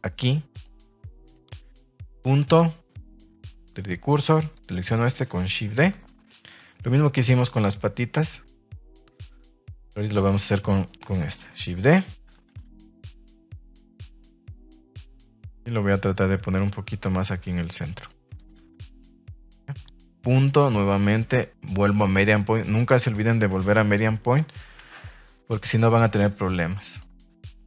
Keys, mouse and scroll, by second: 0.5 click, 1.2 click, 4.5 right click, 5.5 shift+d, 6.0 Escape, 6.5 r, 10.8 click, 11.4 shift+d, 11.7 Escape, 12.3 r, 13.5 click, 15.1 g, 16.5 click, 17.0 right click, 17.4 g, 18.3 right click, 18.5 g, 19.3 click, 22.9 ctrl+s, 23.0 a, 23.1 a, 23.5 shift+middle drag, 24.1 shift+middle click, 24.7 ctrl+s, 24.8 shift+middle drag, 26.9 click.